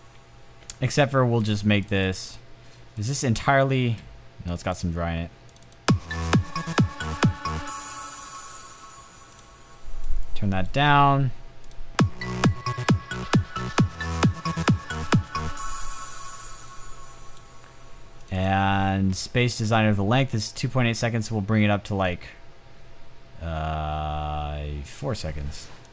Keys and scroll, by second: 0.5 space.